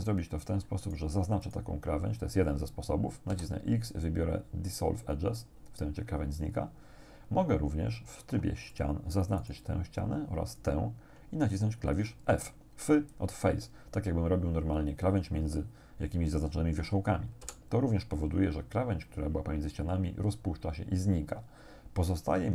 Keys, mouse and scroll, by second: 0.9 right click, 1.5 shift+right click, 3.3 x, 5.1 click, 8.2 ctrl+Tab, 8.7 ctrl+click, 9.5 right click, 10.6 shift+right click, 17.5 f, 22.3 ctrl+Tab.